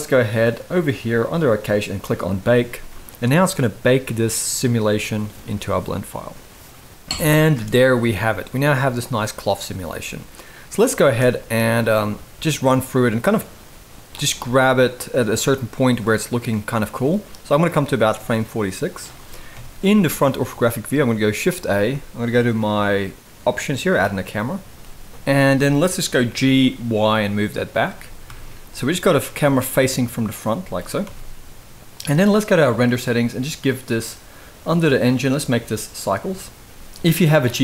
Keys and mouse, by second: 1.8-7.9 drag, 7.2 space, 8.3-8.6 middle drag, 10.7 space, 11.1-13.8 drag, 14.1-14.4 middle drag, 15.7-17.3 drag, 17.6-18.7 middle drag, 19.2 KP_1, 21.4 shift+a, 25.1 middle drag, 26.0 g, 28.0 KP_0, 29.0 g, 30.3 g, 32.6 click, 34.8-35.9 drag, 37.4-37.6 drag.